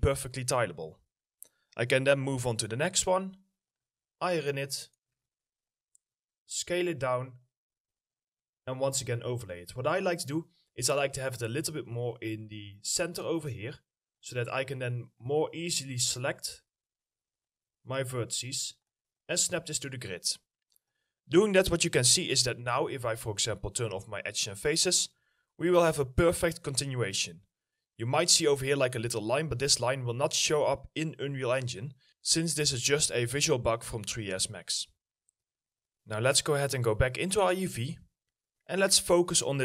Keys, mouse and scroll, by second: 3.5-4.7 scroll down 2, 3.8 middle click, 5.1 ctrl+click, 6.4 ctrl+click, 6.4 scroll up 1, 7.7 middle click, 8.1-10.0 scroll up 1, 10.0 middle click, 21.3 middle click, 24.4 middle click, 25.5 alt+middle click, 26.6 scroll up 1, 30.3-30.7 scroll down 1, 31.3 middle click, 31.8 alt+middle click, 38.8 middle click.